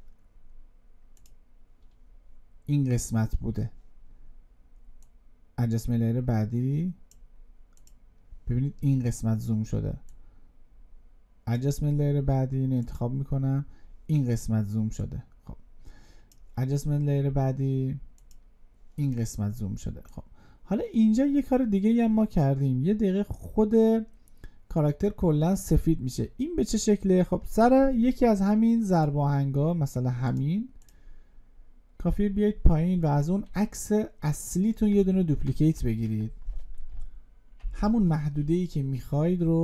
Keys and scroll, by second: 35.3 ctrl+d, 37.4 alt+[.